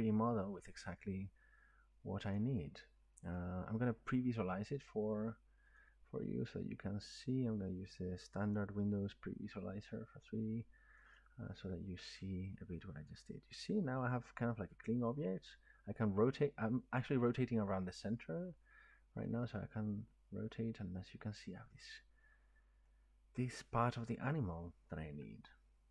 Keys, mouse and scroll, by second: 0.3-0.7 drag, 2.3 click, 3.4 click, 5.8 click, 11.0 click, 11.2 click, 13.1 click, 13.6 scroll, 13.9 middle click, 14.0 middle click, 16.0 scroll, 16.6-17.1 drag, 16.6-17.1 middle drag, 17.8-18.1 drag, 17.8-18.1 middle drag, 18.2 middle click, 18.4-19.1 scroll up 4, 19.2-22.3 middle drag, 24.4-25.9 middle drag.